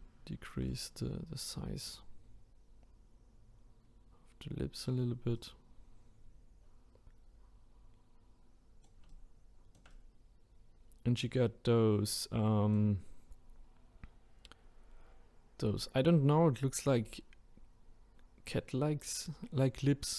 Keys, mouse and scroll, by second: 1.8-20.1 right drag.